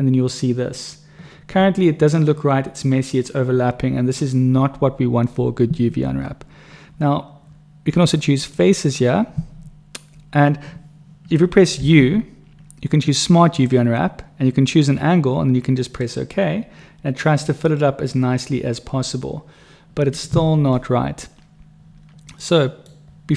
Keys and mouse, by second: 8.2 click, 11.8 u, 22.5 middle click.